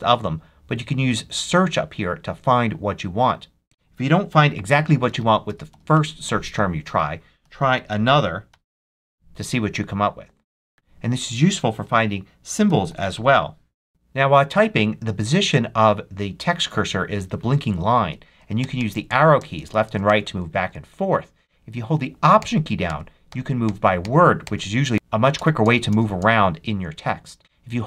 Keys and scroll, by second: 4.7-6.3 typing, 7.3 super+a, 7.6 super+h, 7.9 p, 8.4 y, 10.7 super+BackSpace, 12.3-13.5 typing, 18.5 Right, 19.3 Left, 19.9 Right, 22.3 alt+Right, 24.7 alt+Left, 25.2 alt+Left.